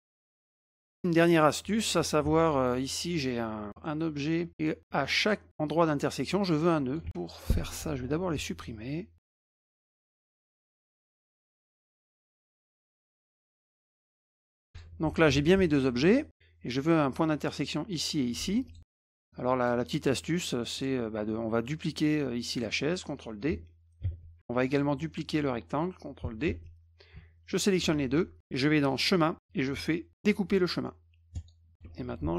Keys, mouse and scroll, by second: 0.0 middle click, 0.8 middle click, 2.2 F2, 2.7 click, 3.7 middle click, 6.3 click, 7.0 ctrl+z, 7.1 click, 9.2 click, 10.1 click, 10.3 click, 12.5 click, 13.2 click, 13.8 ctrl+a, 14.5 click, 14.7 shift+click, 18.6 F1, 18.7 click, 19.2 middle click, 19.6 click, 20.1 middle drag, 20.8 click, 24.0 ctrl+d, 24.7 click, 26.4 ctrl+d, 27.5 shift+click, 28.9 click, 31.3 click.